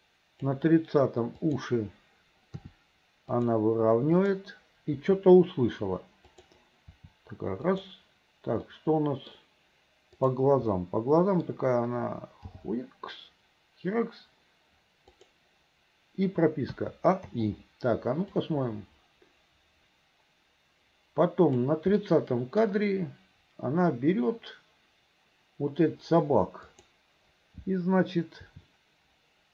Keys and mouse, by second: 1.5 click, 2.7 r, 4.3 click, 5.1 r, 7.0 r, 8.8 click, 10.3 click, 10.8 middle click, 12.6 g, 16.8 a, 17.4 i, 18.5-21.8 drag, 22.1 middle click, 26.8 click, 28.6 r.